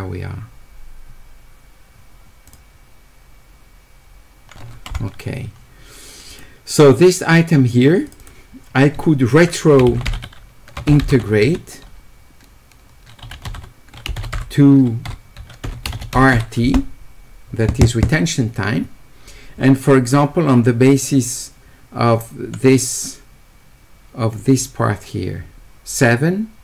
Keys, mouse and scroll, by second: 6.3 click, 8.1 click, 8.2 click, 10.2 s, 11.2 e, 13.2 w, 13.6 e, 15.9 w.